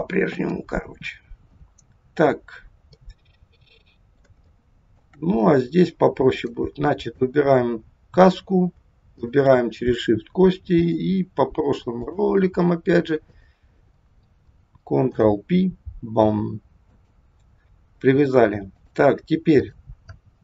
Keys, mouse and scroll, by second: 2.3-2.8 scroll down 2, 3.0 middle click, 4.5 shift+middle click, 5.3-6.0 scroll up 2, 6.4 click, 6.9 click, 9.2 shift+click, 10.6 click, 13.3 click, 15.0 ctrl+p, 18.8 click.